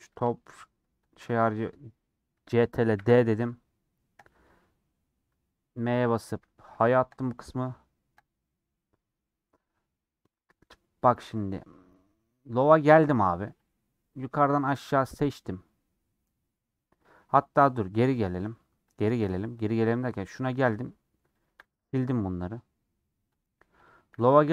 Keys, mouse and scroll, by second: 0.0 click, 1.0 shift+click, 2.9 shift+d, 14.6 shift+click, 19.5-21.4 drag, 21.7 x.